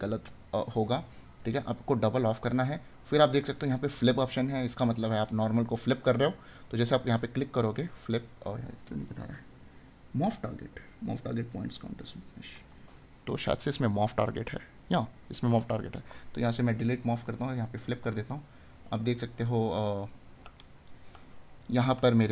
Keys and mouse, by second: 18.7 right click, 20.3 right click.